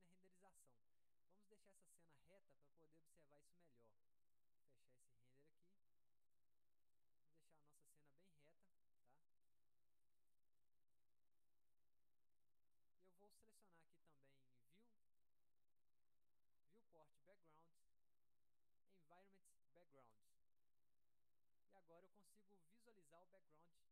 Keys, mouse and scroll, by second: 3.9 click, 4.4 click, 6.4 click, 7.2 alt+middle click, 7.9 middle click, 8.0 scroll down 1, 8.8 click, 9.2 middle click, 9.4-10.2 scroll down 1, 9.6 middle click, 10.4 middle click, 10.5-10.8 scroll up 2, 10.8 alt+middle click, 11.1 scroll down 2, 11.6 alt+middle click, 11.9 alt+scroll up 2, 12.6 middle click, 13.5 middle click, 13.5-13.8 scroll up 1, 14.4 middle click, 15.2 click, 20.3 click, 23.0 middle click, 23.3 scroll down 1.